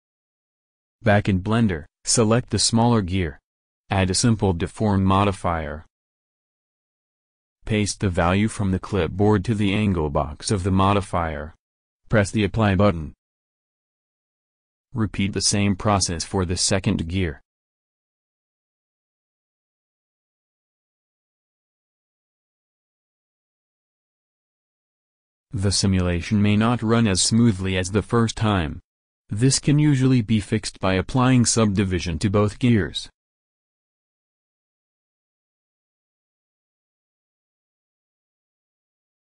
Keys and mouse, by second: 2.4-3.4 drag, 3.9 ctrl+v, 10.9 click, 14.2-16.0 drag, 17.3 alt+Tab, 19.8 alt+Tab, 20.2 middle click, 26.3-27.4 middle drag, 27.4 ctrl+v, 28.6 click, 31.8 click, 32.4-33.5 middle drag, 33.5 click, 33.8 middle click, 34.3 Tab, 34.9 a, 35.0 click, 35.0 a, 36.2 w, 37.9 Tab, 38.9 Tab.